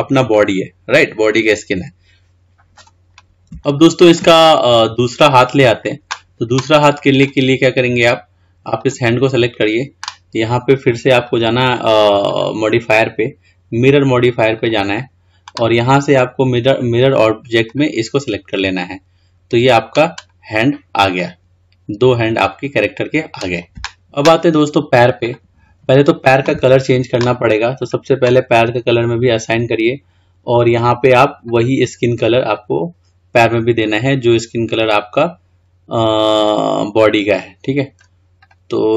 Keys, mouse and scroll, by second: 0.5-7.6 middle drag, 8.3-8.7 drag, 8.9 click, 11.5 click, 12.4-15.4 drag, 16.8 click, 18.9-20.3 middle drag, 20.3 click, 21.4-23.9 middle drag, 25.4 click, 27.9 click, 29.1-31.7 drag, 38.6 click.